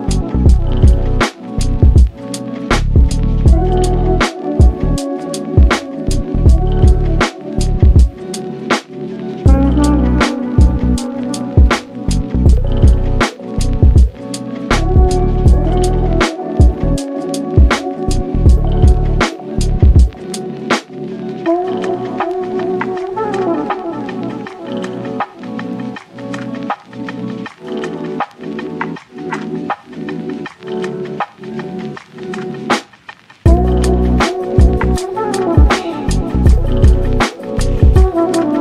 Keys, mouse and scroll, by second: 0.1 2, 0.9 click, 1.2 scroll up 1, 1.2 middle click, 1.7 KP_3, 2.1 scroll down 2, 2.3 shift+middle click, 2.7 ctrl+b, 4.7-5.8 scroll down 1, 5.8-6.4 scroll down 1, 6.4 g, 8.3 Tab, 8.9-9.8 middle drag, 9.8 Tab, 10.9 a, 11.3 alt+e, 14.4 middle click, 15.1 KP_3, 16.2 1, 16.5 z, 16.9 scroll up 1, 17.0 click, 17.5 g, 18.8 click, 19.1-19.6 scroll up 4, 19.6 shift+middle click, 20.1 g, 21.7 g, 23.0 scroll down 1, 23.2 Tab, 23.4 z, 23.7 click, 24.0-24.4 middle drag, 24.4 scroll up 1, 24.7 shift+middle click, 25.2 click, 25.4 s, 26.7 scroll down 1, 27.0 click, 27.2 scroll up 2, 27.5 ctrl+a, 28.7 ctrl+s, 29.0-30.4 middle drag, 30.4 click, 30.9 KP_3, 31.6 g, 32.5 s, 33.0 g, 34.3 ctrl+s, 34.8 click, 35.1-35.4 scroll down 1, 35.4-37.5 middle drag, 37.5 click, 37.8 Tab.